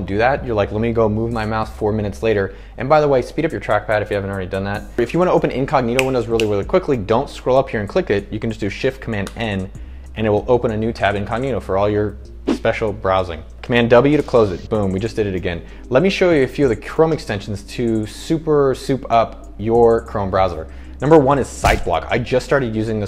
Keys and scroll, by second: 9.4 shift+super+n, 14.4 super+w.